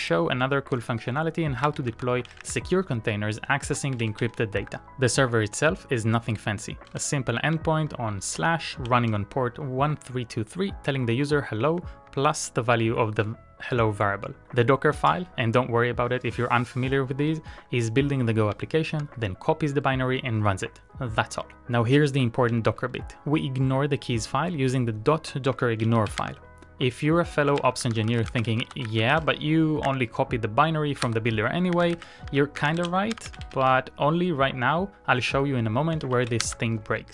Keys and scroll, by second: 1.5-2.5 typing, 2.7 Return, 4.2 shift+g, 7.0-8.5 typing, 9.2 ctrl+d, 11.8-15.0 typing, 18.6-19.3 typing, 22.5 shift+z, 22.7 shift+z, 24.9 c, 25.8 BackSpace, 26.2 shift+k, 27.4-34.1 typing, 36.0 ctrl+a, 36.4 shift+k.